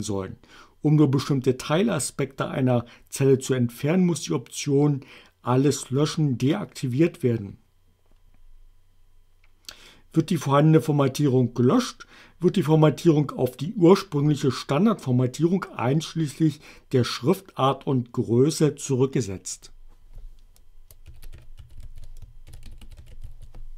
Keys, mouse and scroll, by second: 19.6 click, 20.9-23.7 typing.